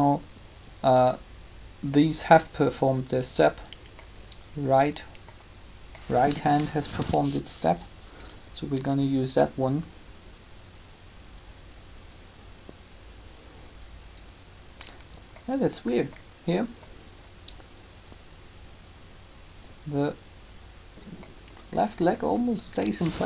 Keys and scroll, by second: 6.6 3, 23.0 3.